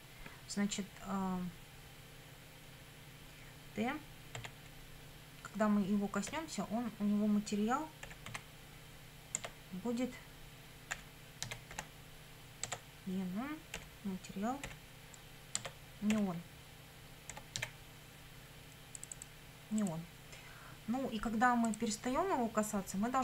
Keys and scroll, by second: 4.4 t, 6.3 ., 7.8-8.8 typing, 9.4 Tab, 10.9 =, 11.5 e, 11.7 n, 12.7 Tab, 13.8 ., 14.7 m, 15.6 Tab, 16.2 ., 17.3 n, 17.6 e.